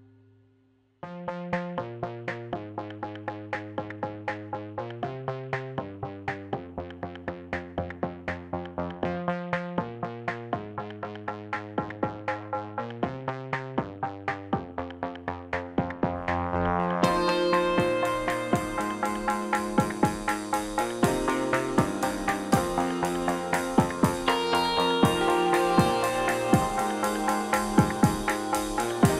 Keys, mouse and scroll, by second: 2.9 shift+r, 6.0 r, 10.0 alt+d, 11.9-13.2 middle drag, 13.2 click, 13.4 middle click, 14.3 click, 14.7 r, 15.3-16.4 middle drag, 16.4 click, 16.6-17.1 middle drag, 17.1 r, 17.5 click, 17.6-19.3 middle drag, 19.3 click, 20.4 r, 21.4-21.9 middle drag, 21.9 r, 22.5-24.7 middle drag, 24.9 middle drag, 25.2 r, 25.7 drag, 25.9 r, 26.6-27.2 middle drag, 27.2 r, 27.8 drag, 27.9-29.1 middle drag.